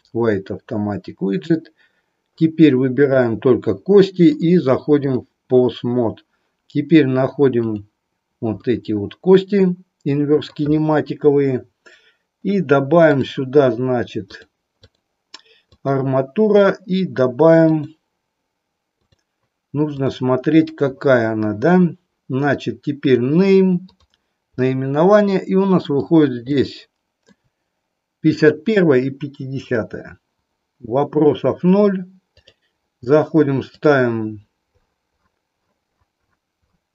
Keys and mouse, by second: 2.9 click, 4.1-5.3 drag, 7.5 click, 8.5-10.5 middle drag, 14.8-15.9 drag, 17.8-20.0 drag, 23.9 click, 25.4 middle click, 26.6 shift+middle click, 33.6-36.9 drag.